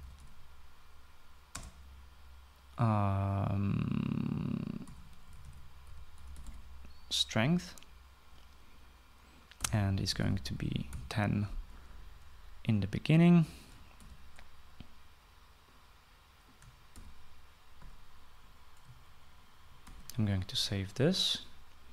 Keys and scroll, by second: 0.0-2.1 typing, 5.2-7.5 typing, 9.9-11.5 typing, 14.6 ctrl+c, 17.5 ctrl+v, 20.4 ctrl+s.